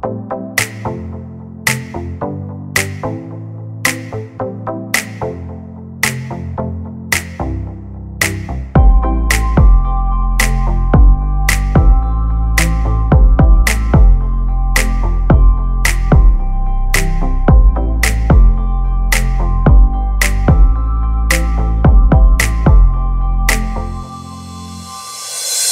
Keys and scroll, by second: 5.9 ctrl+c.